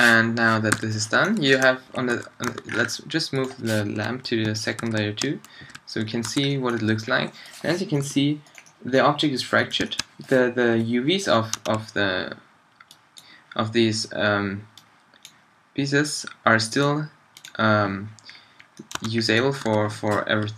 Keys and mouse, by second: 0.8 2, 2.5 1, 3.9 m, 5.7 2, 6.3 a, 8.0 g, 10.7 g, 11.6 Tab, 18.2 click, 19.0 Tab, 19.7 a, 20.3 Left.